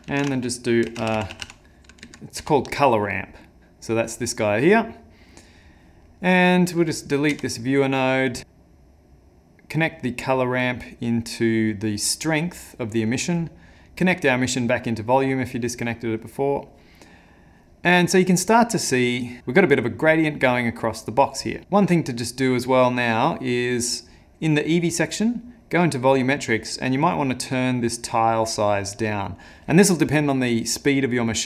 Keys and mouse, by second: 0.1 ctrl+shift+a, 6.1 middle click, 6.8 click, 7.4 x, 8.3 click, 8.4 click, 18.0 middle click, 19.0 middle click, 19.4 click, 20.1 click.